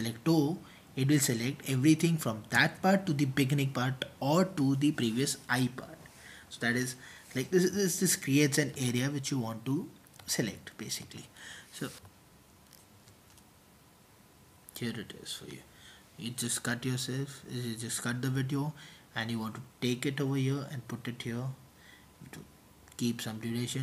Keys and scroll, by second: 0.0-1.1 typing, 2.2 super+t, 3.6-5.2 typing, 9.0 super+t, 9.0 typing, 10.2-12.0 typing, 12.0 Return, 20.0 super+t, 20.2 Return, 20.2 typing, 21.0 Return, 22.2 typing.